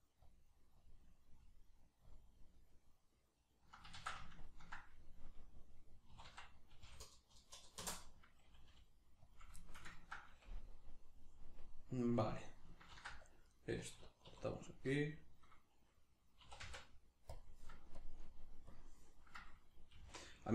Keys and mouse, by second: 3.9 ctrl+z, 4.4-6.1 ctrl+drag, 6.1 s, 9.4 click, 9.7-13.6 ctrl+shift+middle drag, 12.9 ctrl+r, 13.6 right click, 14.3 2, 14.5 right click, 16.4 e, 17.4 click, 19.9-20.5 drag, 19.9 g.